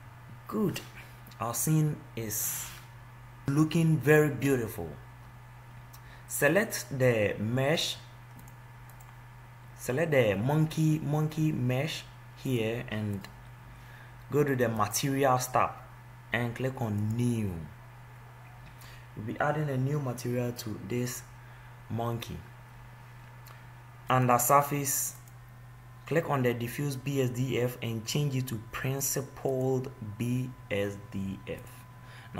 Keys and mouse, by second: 10.4 click, 12.7-14.5 drag, 15.0-19.2 drag, 24.3-27.4 drag, 31.9-32.3 drag.